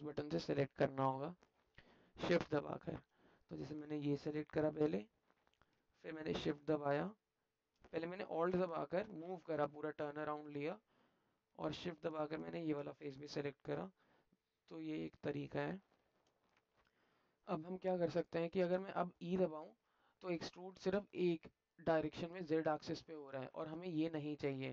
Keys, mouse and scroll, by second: 0.2-1.4 alt+middle drag, 2.1 alt+middle click, 3.8 click, 4.8 alt+click, 8.3-10.4 drag, 12.2 shift+click, 13.3-16.1 alt+drag, 17.0 click, 18.5 alt+click, 19.6 e.